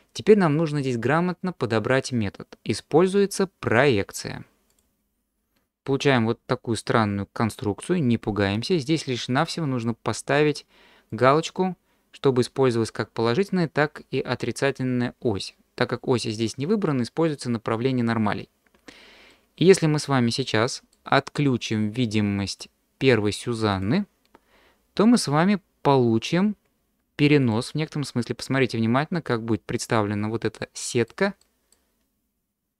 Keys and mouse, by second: 3.7-5.0 drag, 5.8-7.6 middle drag, 11.3 click, 19.3-20.9 middle drag, 22.2 click, 23.7 middle click, 25.2-27.5 middle drag, 28.0-29.9 middle drag, 30.6-31.1 middle drag, 31.4-31.7 middle drag.